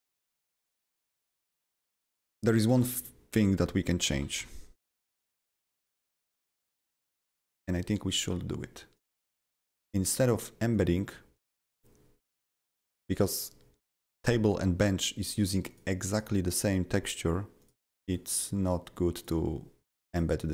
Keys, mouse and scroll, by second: 0.2 1, 1.2 Right, 1.7 Delete, 1.9 Delete, 2.0 Delete, 2.2 Delete, 2.7 BackSpace, 4.4 KP_Decimal, 5.0 click, 6.1 click, 6.1 click, 6.9 click, 7.6 click, 8.9 click, 9.6 click, 10.7 click, 11.3 click, 12.8 click, 15.3 click, 15.7 click, 16.1 click, 16.5 click, 17.0 click, 17.6 click, 18.0 click, 19.2 click, 20.1 click.